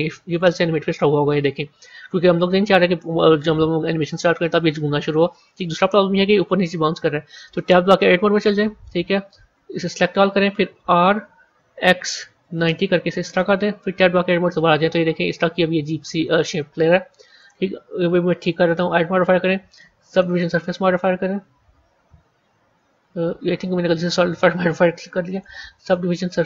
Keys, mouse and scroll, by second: 7.9 Tab, 9.6 a, 9.8 a, 10.7 r, 13.6 Tab, 17.3 click, 18.5-21.6 drag, 24.8 click, 25.2-26.4 drag.